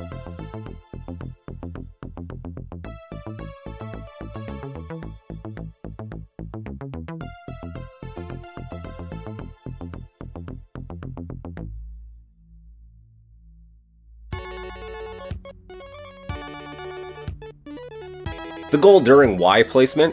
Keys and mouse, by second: 4.2 click, 4.3-7.9 middle drag, 4.9 KP_3, 11.2 g, 18.8-19.8 drag, 20.0-20.1 shift+middle drag.